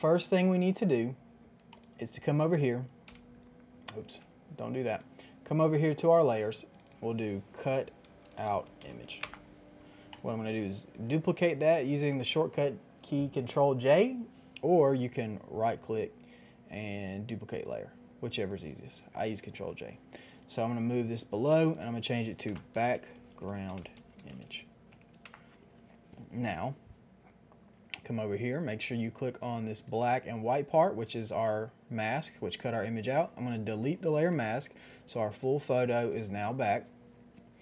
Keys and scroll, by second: 4.0 ctrl+z, 7.6-9.2 typing, 11.8 ctrl+j, 22.5-25.2 typing.